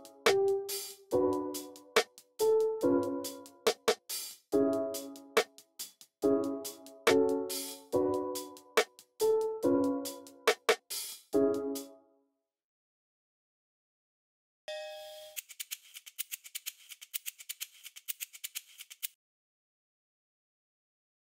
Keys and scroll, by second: 1.0 x, 9.6 super+w, 10.1 super+w, 10.6 alt+super+s, 10.9-11.5 typing, 14.6 typing, 15.1 super+r, 18.4 x.